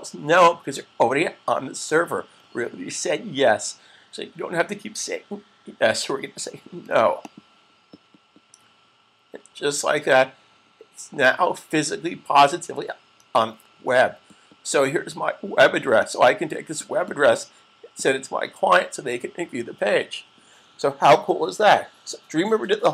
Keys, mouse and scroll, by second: 7.4 click, 15.8 click.